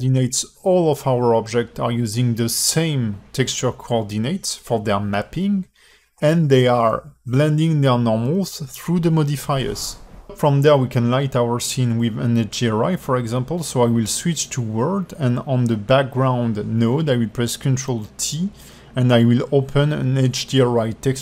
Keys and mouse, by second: 1.2-1.9 alt+middle drag, 4.8 click, 6.7-14.1 drag, 15.5 alt+shift+middle click, 16.3 click, 17.2 ctrl+t, 17.8 g, 19.0 drag, 19.8 click.